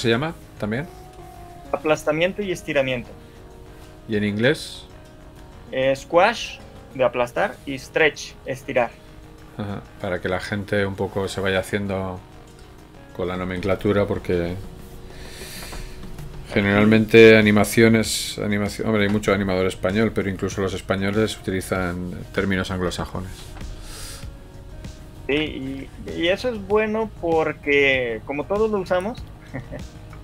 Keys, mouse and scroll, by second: 0.3 right click, 3.9 scroll up 1, 4.1 shift+middle click, 9.7 right click, 12.1 scroll down 1, 12.3 shift+middle click, 13.1 right click, 15.7 shift+middle click, 16.5 g, 18.1 g, 20.9 right click, 21.5 alt+a, 22.7 Escape, 23.1 right click, 25.3 alt+g, 26.1 shift+middle click, 27.3 click, 28.9 right click.